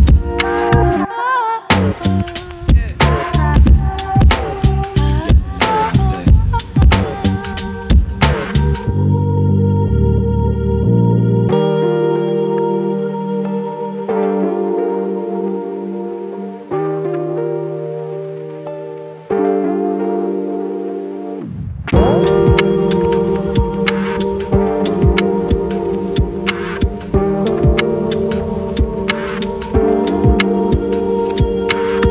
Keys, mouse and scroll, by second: 0.0 click, 0.8-2.1 scroll down 4, 5.1-5.5 drag, 7.3 click, 8.1 click, 10.1 click, 17.1 click, 18.1 scroll up 2, 18.3 click, 18.5 g, 18.5 z, 19.1 click, 19.3 click, 20.2 scroll up 6, 20.4 click, 20.6 click, 21.0 click, 21.4 click, 22.1 Right, 22.3 Right, 22.3 KP_8, 22.4 KP_8, 22.4 KP_5, 22.5 KP_6, 22.6 scroll down 2, 23.0 click, 23.2-23.7 Left, 23.4 Right, 24.0-25.1 Right, 24.0 Down, 24.4 Left, 25.3 shift+Right, 25.3 shift+Left, 25.5 click, 26.0 drag, 26.4 click, 26.8 BackSpace, 26.9 BackSpace, 27.0 click, 27.1 click, 27.7 click, 27.8 click, 28.1 Right, 28.7 Right, 28.7 /, 28.9 click, 28.9 scroll down 3, 29.2 click, 29.8 click, 30.1 scroll down 1, 30.4-32.1 typing, 31.2 right click, 31.4 scroll up 3, 31.4 scroll down 1, 31.6 click, 31.8 click, 32.0 click.